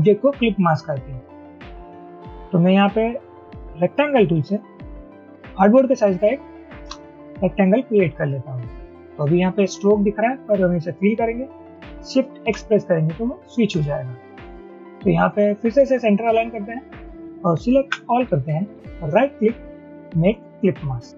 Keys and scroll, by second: 4.0 m, 7.0 Return, 12.5 x, 17.9 ctrl+x.